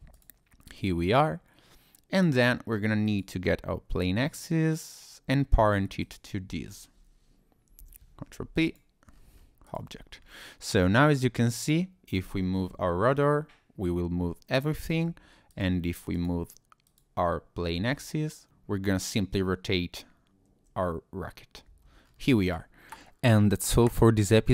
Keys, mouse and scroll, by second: 0.1 click, 0.7 click, 1.5-2.3 scroll down 2, 3.0 click, 4.2 middle click, 6.0 shift+click, 7.8 ctrl+p, 9.1-9.7 scroll down 4, 9.6 click, 9.9-11.0 scroll up 4, 11.6 click, 12.8 r, 14.9 Escape, 15.5 click, 16.1 click, 16.8 click, 17.7 r, 22.0 Escape, 22.0-22.4 scroll down 3, 22.4 click, 22.8 scroll down 1.